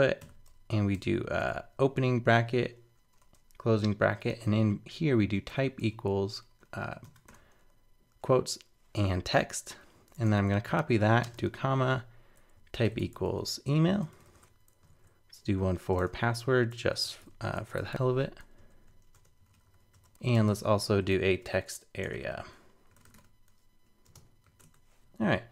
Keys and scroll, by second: 9.9 super+Right, 10.2 shift+super+Left, 10.4 super+c, 11.4 super+v, 14.9 super+Right, 16.0 super+v, 20.1 super+Right.